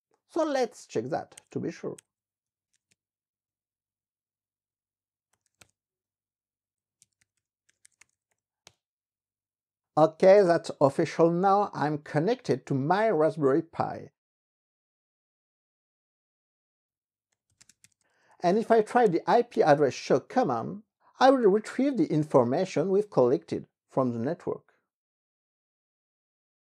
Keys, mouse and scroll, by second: 0.0-3.1 typing, 3.4 Return, 5.1-8.8 typing, 17.1-19.6 typing.